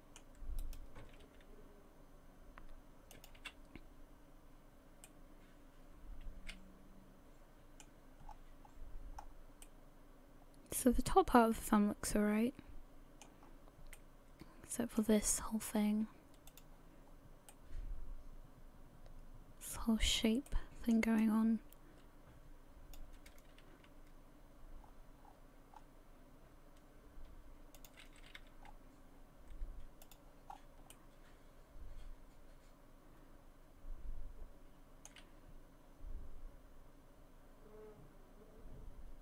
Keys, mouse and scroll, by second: 0.6 right click, 1.2 g, 5.0 middle click, 8.2 scroll down 7, 9.1-9.6 scroll up 4, 9.6 middle click, 13.4-13.9 scroll up 3, 14.1 middle click, 16.5 click, 17.1-17.5 scroll down 2, 17.5 middle click, 20.5 middle click, 21.2 click, 23.8 r, 28.2 a, 28.4 a, 28.6-29.9 scroll down 4, 30.0 click, 30.5 scroll up 4, 30.9 middle click.